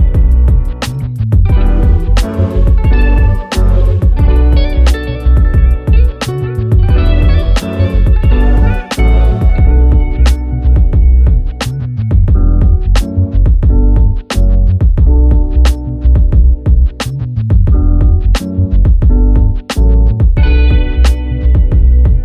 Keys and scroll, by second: 3.7 ctrl+g.